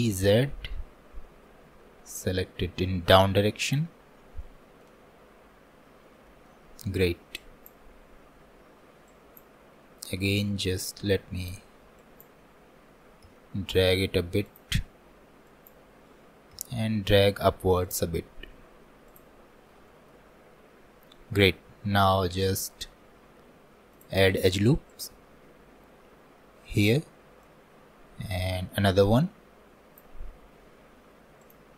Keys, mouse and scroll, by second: 4.0 scroll down 1, 4.4 shift+middle click, 5.1-5.6 scroll down 2, 5.8-6.1 scroll up 3, 6.3-7.4 shift+middle drag, 7.4-9.1 drag, 10.2 s, 19.5-19.9 scroll up 2, 19.9-24.0 shift+middle drag, 24.0-30.5 drag, 31.4-31.7 drag.